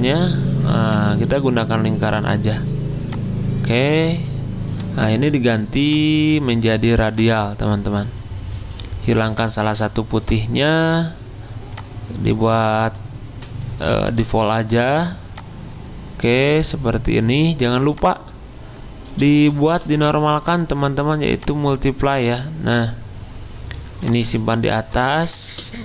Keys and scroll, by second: 14.1 g, 19.7 v, 25.1 ctrl+shift+].